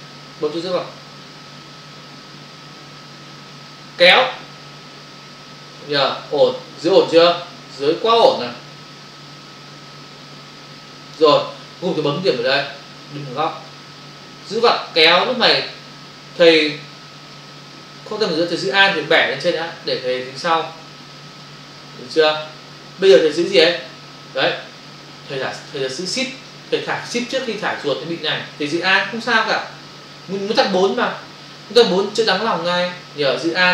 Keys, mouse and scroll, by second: 3.6 click, 14.5 click, 31.9 alt+click.